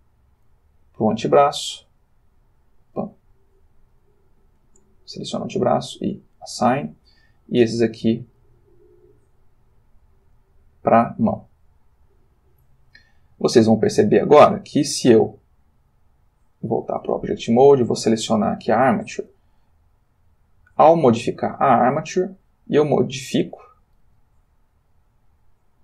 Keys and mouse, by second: 0.6 middle click, 2.2-3.3 drag, 3.3 middle click, 4.0 click, 5.1 click, 6.3 click, 7.7 click, 10.3 click, 11.2 click, 15.4 click, 16.3 click, 17.8 click, 19.2 r, 20.6 click, 21.3 click, 22.1 r, 23.3 click, 23.7 click, 24.0 r.